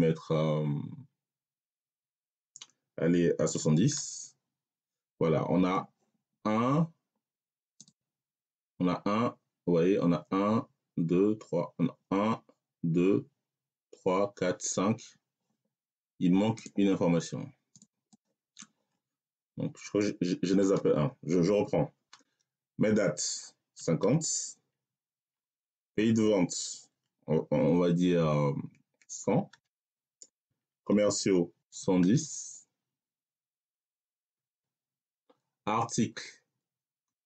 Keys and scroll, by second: 3.4 7, 3.8 0, 20.5 BackSpace, 23.4-25.1 typing, 28.9-32.0 typing, 34.2 ..